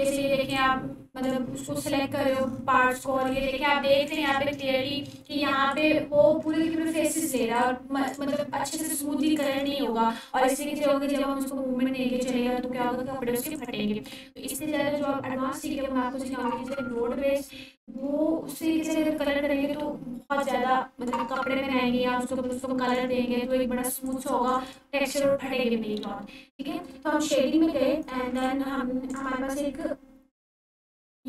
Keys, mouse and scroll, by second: 0.5-1.4 drag, 2.5-2.9 scroll up 1, 3.5-4.2 ctrl+alt+click, 6.0-8.2 ctrl+alt+drag, 16.3 click, 20.3 click, 20.4-21.4 ctrl+alt+drag, 28.3 click, 28.4-29.3 ctrl+alt+drag.